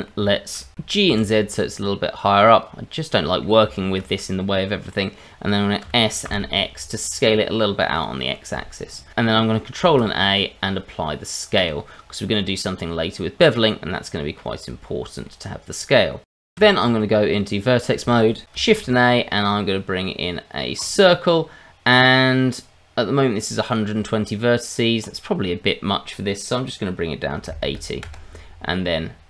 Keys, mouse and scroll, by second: 0.3 shift+middle click, 0.7 g, 1.0 z, 2.3 click, 2.8-3.2 scroll down 2, 3.2 middle click, 3.7 shift+middle click, 4.9 middle click, 5.8 s, 6.2 x, 7.9 click, 9.1 Tab, 9.8 ctrl+a, 12.1 middle click, 12.9-13.9 scroll down 1, 13.9 middle click, 14.8 shift+middle click, 16.1 middle click, 16.4 shift+middle click, 16.6 Tab, 18.7 shift+a, 21.9-22.4 scroll up 2, 25.0 click.